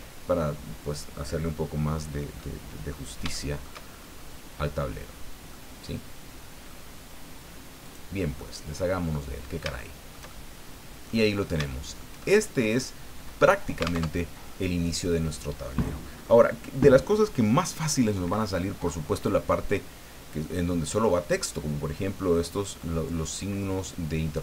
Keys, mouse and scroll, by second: 2.4 middle click, 3.3 shift+middle click, 3.9-4.4 shift+scroll up 3, 4.8-5.4 scroll down 4, 5.5-6.9 middle drag, 7.8 click, 8.4-11.2 middle drag, 11.2 scroll up 1, 11.7 shift+middle click, 12.2-13.7 shift+middle drag, 14.0 alt+Tab, 18.7 scroll up 2, 19.4 scroll down 2.